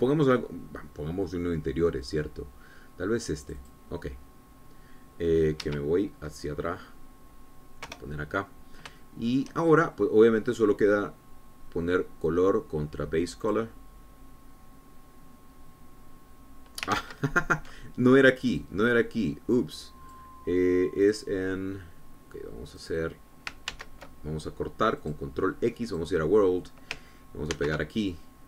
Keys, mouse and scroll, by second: 4.5 click, 6.7 Escape, 7.5 scroll down 2, 9.0 KP_0, 10.1 shift+click, 10.8-11.5 shift+scroll up 4, 11.6 click, 13.4-14.9 drag, 18.1 ctrl+z, 19.6 click, 20.7 click, 22.2 click, 23.9 click, 24.8 ctrl+x, 26.1 click, 27.0 click.